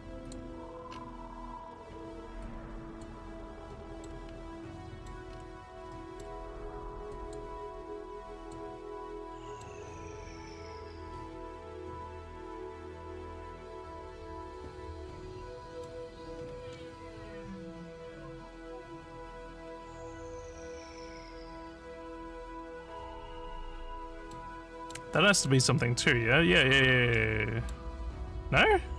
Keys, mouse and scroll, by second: 0.3 click, 0.9-1.2 scroll down 5, 2.4 click, 3.7 middle click, 4.3 scroll up 1, 4.8 middle click, 5.3 scroll up 1, 5.3 scroll down 2, 5.9 middle click, 7.1 click, 7.8 click, 8.9 middle click, 15.1 scroll up 1, 15.4 click, 16.4 scroll up 2, 19.4 middle click, 25.2 middle click, 25.8 middle click, 27.2 middle click, 28.3 middle click.